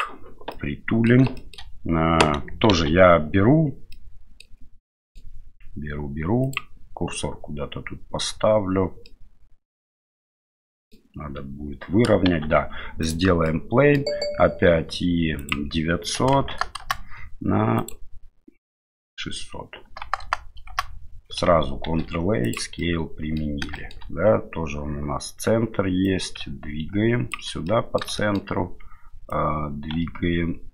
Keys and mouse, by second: 0.5-1.1 middle drag, 1.3 shift+middle drag, 2.7 shift+a, 3.9 middle click, 4.8-5.3 middle drag, 9.1-10.9 middle drag, 12.2 shift+a, 13.5-14.0 middle drag, 15.4-17.2 drag, 16.5 KP_0, 17.9-21.1 drag, 20.2 KP_0, 21.8 ctrl+a, 22.8 middle click, 23.7 shift+middle click, 26.2-27.3 ctrl+drag, 27.7 middle click, 28.2 shift+middle click, 29.3-30.7 drag.